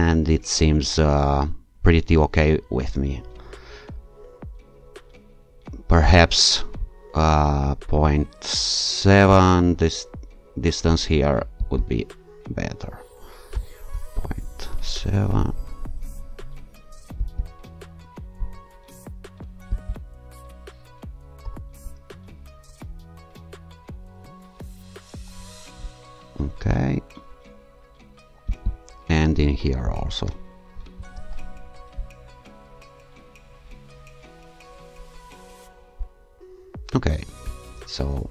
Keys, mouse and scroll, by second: 0.0-1.3 scroll down 2, 9.3 click, 11.6 click, 13.5 0, 13.9 ., 14.7 7, 14.9 Return, 17.2 click, 19.7 click, 21.4 0, 21.8 ., 24.6 7, 25.1 Return, 28.5 click, 29.8 0, 30.2 ., 30.9 7, 31.2 Return, 36.1-37.5 scroll down 3.